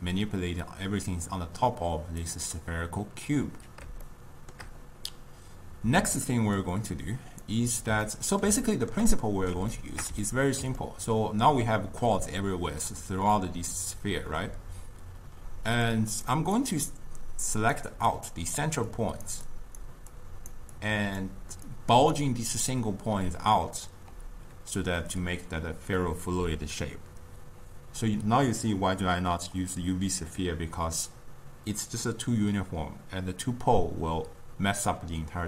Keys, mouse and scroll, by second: 2.3-4.2 drag, 4.2-6.7 shift+middle drag, 6.7-8.2 drag, 8.2-14.0 ctrl+middle drag, 15.5-24.0 typing, 16.0 click, 16.7 click, 18.2 click, 19.0 click, 19.6 click, 20.2 click, 20.9 click, 21.8 click, 26.4 d.